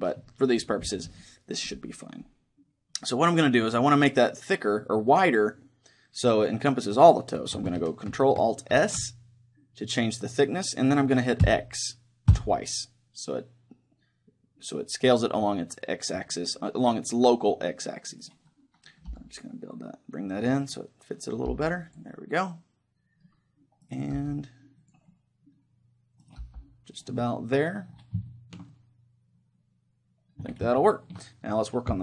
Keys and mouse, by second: 8.8 ctrl+alt+s, 16.1-18.0 drag, 16.4-20.4 middle drag, 18.2-20.0 right drag, 19.1 g, 20.8-23.7 drag, 21.5 g, 23.7 middle click, 23.8-24.9 right drag, 24.2 g, 24.9 click, 26.4 g, 26.8 click, 28.8 click, 29.0-30.3 middle drag, 30.9 middle click, 31.7-32.0 right drag.